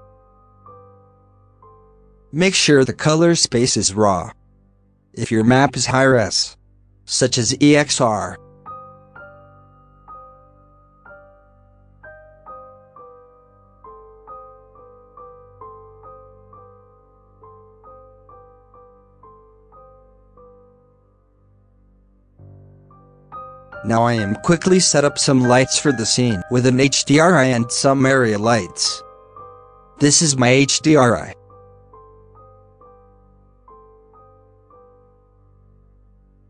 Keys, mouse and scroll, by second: 0.4-2.6 drag, 2.6 scroll up 3, 3.3-3.6 middle drag, 3.6-6.6 drag, 6.6 scroll down 2, 7.3 middle click, 7.3 alt+a, 7.6 scroll down 2, 7.8 middle click, 8.0-8.4 scroll up 2, 8.4-10.3 drag, 10.3-10.7 middle drag, 10.7 click, 11.3 middle click, 11.4 z, 12.4-13.6 shift+middle drag, 13.6 scroll down 2, 13.7 scroll up 1, 14.0 shift+middle click, 14.2-17.3 scroll up 1, 17.3-18.6 scroll up 1, 18.6-19.6 scroll up 1, 19.6-20.7 scroll up 1, 20.7-21.7 scroll up 1, 22.4-23.2 middle drag, 23.2-23.9 scroll down 2, 23.9 z, 25.0 scroll up 3, 26.9-29.6 drag, 32.8 KP_0, 33.3 scroll up 1, 33.4 z, 34.0-34.5 scroll up 1, 35.3-36.4 shift+middle drag.